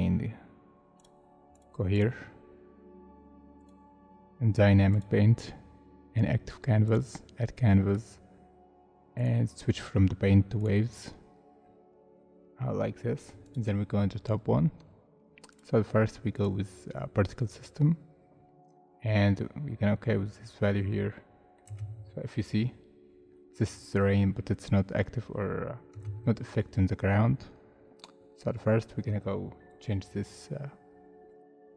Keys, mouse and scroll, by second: 1.9 double click, 7.8 scroll down 1, 11.6 scroll down 1, 18.2 scroll down 1, 20.9 middle click, 21.6 space, 25.9 space, 28.3 scroll down 1, 29.5-31.7 scroll up 1.